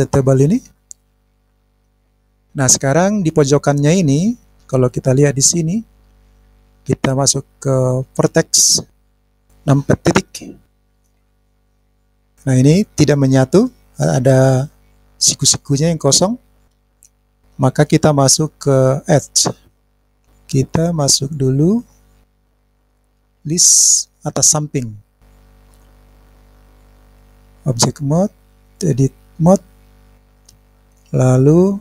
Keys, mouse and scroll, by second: 0.0-1.3 middle drag, 1.8 click, 2.2 scroll down 1, 2.2-3.3 middle drag, 5.0 click, 7.8 click, 9.1 click, 10.1 KP_Decimal, 11.0 scroll down 2, 11.1 scroll up 1, 11.2 scroll down 2, 11.3 scroll up 1, 11.4-12.1 scroll down 4, 12.1-17.4 middle drag, 19.7 click.